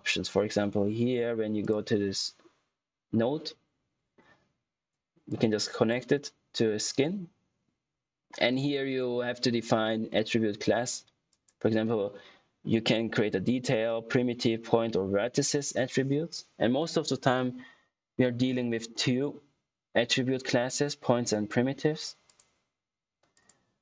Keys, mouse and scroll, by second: 1.5 click, 5.2 click, 11.2 click, 22.2 click.